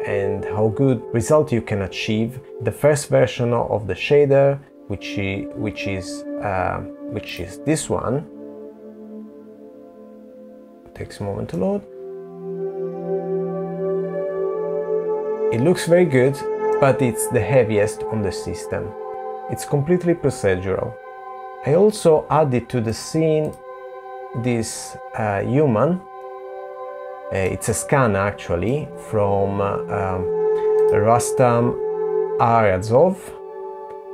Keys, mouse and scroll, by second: 5.7 click, 10.5 middle click, 16.3 middle click, 21.3 click, 21.9 click, 24.1 middle click.